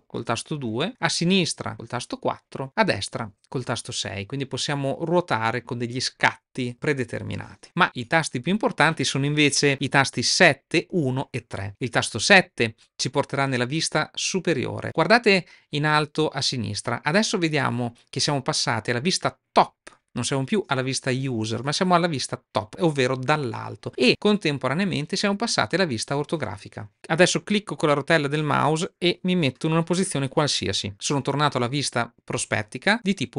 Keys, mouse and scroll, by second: 0.0-0.2 typing, 1.3-3.3 typing, 12.7 KP_7, 28.6-30.9 middle drag.